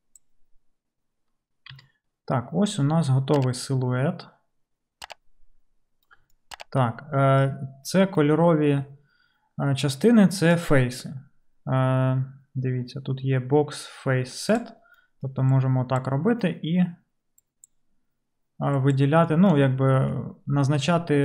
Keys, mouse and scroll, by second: 1.8 d, 6.1 d, 6.2 d, 21.1-21.2 middle drag.